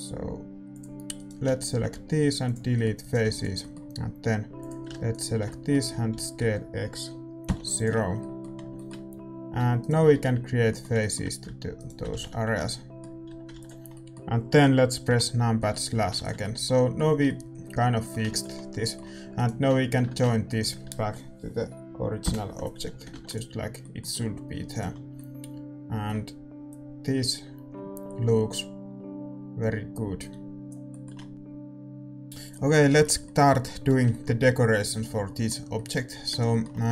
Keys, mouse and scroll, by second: 0.7-2.5 drag, 1.1-7.4 right drag, 2.5 x, 2.7-7.4 middle drag, 3.4 x, 4.5-6.3 drag, 6.1 s, 8.0-13.2 middle drag, 9.1 a, 9.7-13.9 right drag, 10.1 f, 10.2 a, 12.1 f, 12.1 a, 12.4 Tab, 13.2 a, 13.9 ctrl+s, 15.0 KP_Divide, 15.9 a, 16.3 ctrl+s, 19.3-22.8 right drag, 22.2 ctrl+j, 22.8 a, 23.6 ctrl+s, 23.6-28.4 middle drag, 24.7-26.6 right drag, 26.6-30.8 drag, 30.8 middle click, 31.3-32.8 drag, 32.8-36.9 middle drag, 34.8-36.9 right drag, 36.3 Tab.